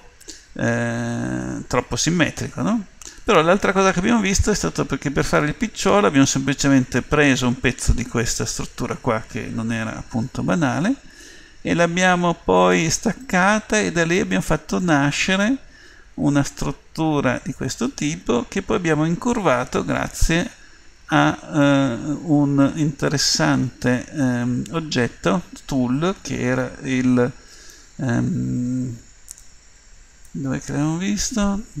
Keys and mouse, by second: 2.5-4.4 middle drag, 6.0-10.2 middle drag, 21.9 middle click, 22.5 middle click, 23.3 middle click, 23.8 middle click, 29.4-31.8 drag.